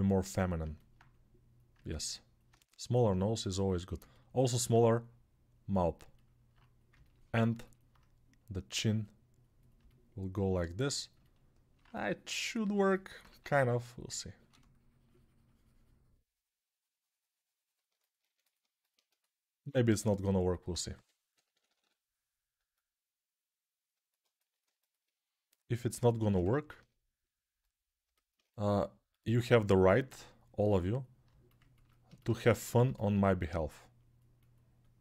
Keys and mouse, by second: 7.1-16.0 ctrl+alt+right drag, 13.3 ctrl+1, 16.0-32.6 shift+drag, 18.0 1, 20.7-21.6 typing.